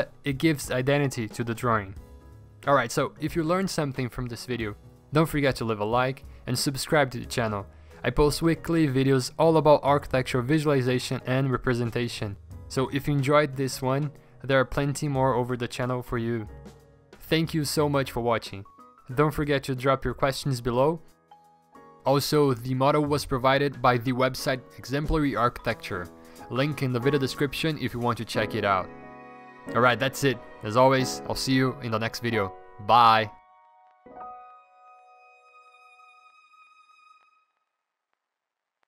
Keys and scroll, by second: 0.1 ctrl+z, 1.5-6.2 typing.